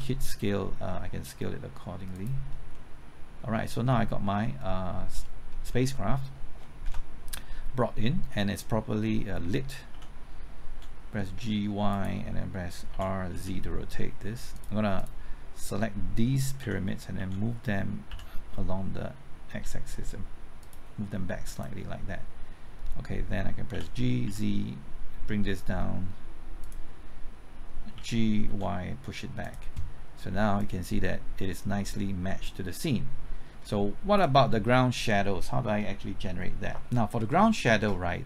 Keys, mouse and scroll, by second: 2.1 click, 2.5 scroll down 1, 2.7 middle click, 3.6 scroll down 1, 3.8 middle click, 4.4 scroll down 1, 4.6-5.7 scroll up 1, 5.7 middle click, 6.8 typing, 9.9-13.3 typing, 14.5 typing, 16.3-18.1 typing, 20.6 click, 23.7-24.2 typing, 26.6 click, 27.9-28.5 typing, 29.4-35.0 drag.